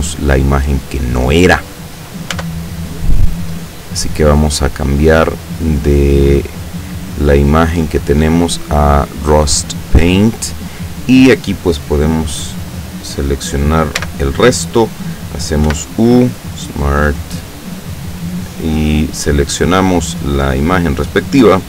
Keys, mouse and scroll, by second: 2.4 Tab, 5.4 click, 7.2 scroll down 2, 7.9 click, 9.5 click, 14.1 l, 15.8 u, 16.5 click, 17.6 click, 19.4 click, 20.2 click.